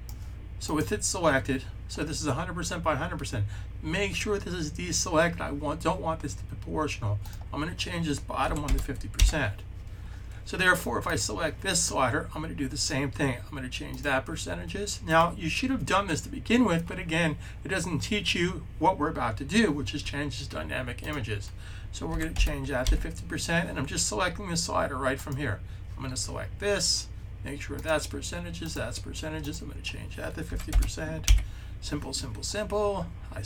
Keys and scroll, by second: 8.0-9.0 typing, 21.7-22.7 typing, 30.1-31.0 typing.